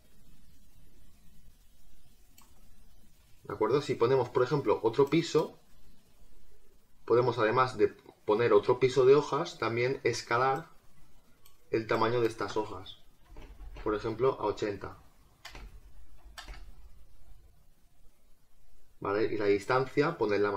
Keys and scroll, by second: 13.1 8.